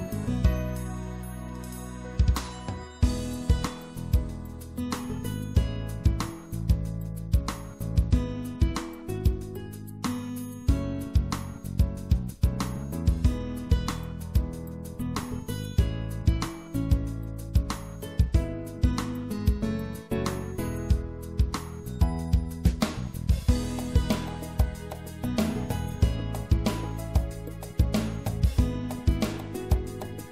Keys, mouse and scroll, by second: 11.3 i, 14.4 middle click, 17.8 e, 18.5-19.9 middle drag, 21.0-23.3 drag, 24.3 middle click, 25.5 middle click, 28.4 middle click, 29.3 middle click.